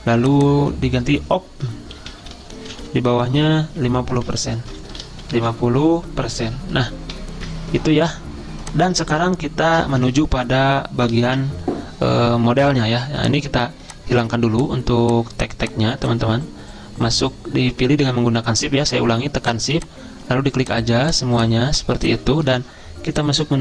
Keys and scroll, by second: 2.2 typing, 3.3 Down, 4.0 ctrl+Left, 4.5 ctrl+shift+Right, 5.5 typing, 7.3 %.